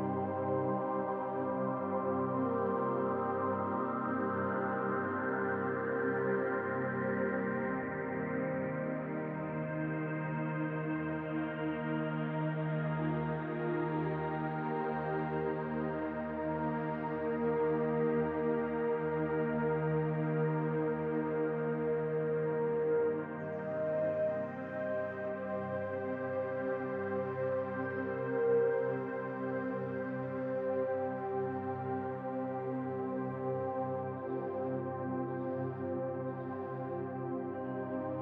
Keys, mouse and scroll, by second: 0.4-7.3 drag, 8.1-11.1 right drag, 11.5 s, 13.9 click, 17.4 click, 19.7 click, 21.9 click, 29.1-32.1 drag.